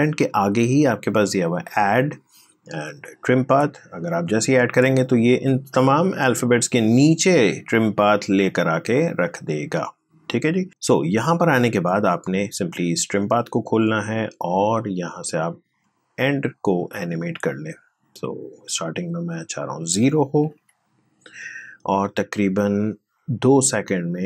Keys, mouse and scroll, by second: 3.4 click, 8.9-11.0 drag, 15.5-19.0 drag, 20.3 0, 21.7-24.2 drag.